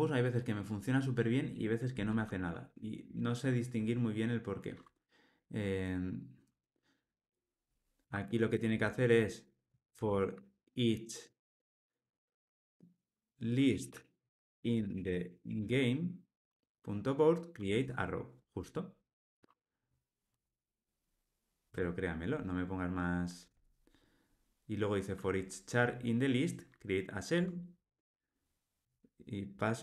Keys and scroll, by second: 17.5 Tab, 27.3 Tab.